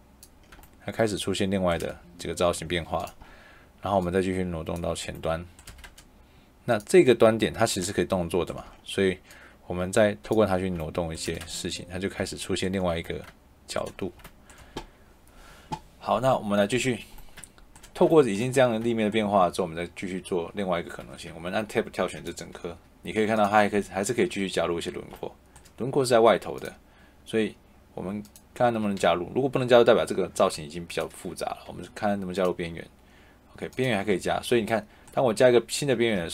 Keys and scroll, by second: 1.7 shift+Escape, 6.1 Escape, 11.2 shift+Escape, 14.5 Escape, 20.7 Escape, 23.1 Tab, 28.7 Escape, 30.4 Tab, 34.0 Escape, 36.1 Escape.